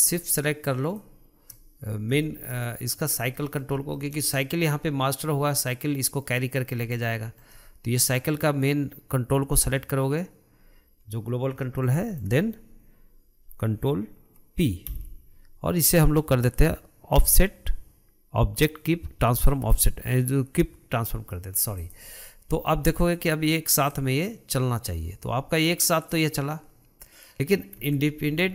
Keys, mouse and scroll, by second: 0.9 shift+click, 2.1 scroll down 2, 2.6-7.0 shift+middle drag, 7.0-7.5 scroll down 1, 7.5-10.6 shift+middle drag, 11.9-15.2 shift+middle drag, 15.2 ctrl+p, 21.6-22.1 middle drag, 22.1 drag, 23.3 click, 24.2 click, 28.3 ctrl+z.